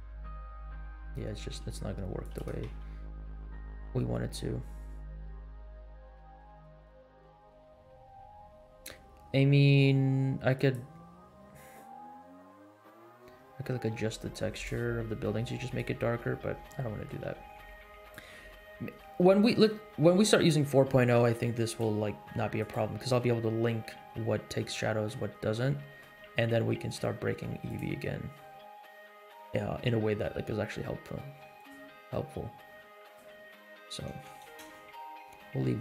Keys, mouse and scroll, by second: 0.3-0.9 scroll up 3, 1.5 r, 2.3 g, 11.2 scroll down 3, 13.2 scroll up 3, 13.3 middle click, 13.9 r, 14.6 g, 16.0 scroll down 2, 16.3 middle click, 17.2 g, 18.3 r, 20.1 middle click, 21.1 r, 21.8 g, 24.5 scroll up 3, 24.8 middle click, 25.3 scroll down 2, 25.6 middle click, 26.2 g, 28.3-29.0 scroll up 4, 29.3 scroll down 2, 30.4 r, 31.7 g, 33.4 scroll down 2, 34.2 space, 34.6 space, 35.0 scroll up 3.